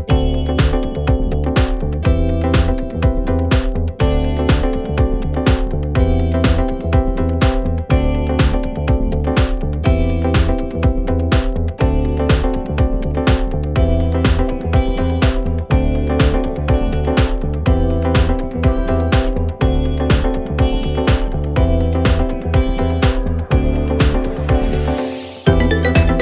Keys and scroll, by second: 17.8 /.